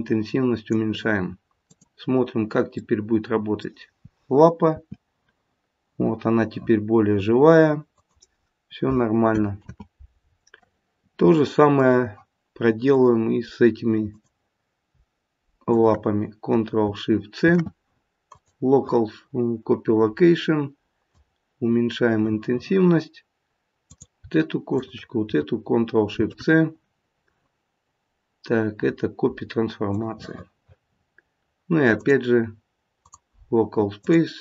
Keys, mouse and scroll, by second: 1.7 click, 2.7 middle click, 4.7 r, 9.5 ctrl+z, 10.7 middle click, 10.9 middle click, 12.9 click, 15.6 click, 16.0 shift+click, 17.4 ctrl+shift+c, 21.1 click, 23.8 click, 24.7 shift+click, 25.2 shift+click, 26.0 ctrl+shift+c, 30.9-31.9 scroll down 5, 31.9 click, 31.9-34.0 scroll down 1, 34.0 click.